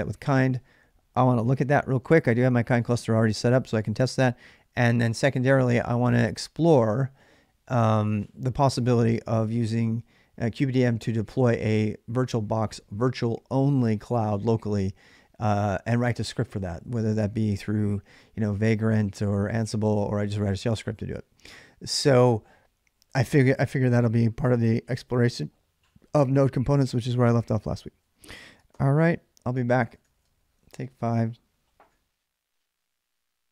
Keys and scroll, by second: 28.2 ctrl+a, 28.5-30.3 typing.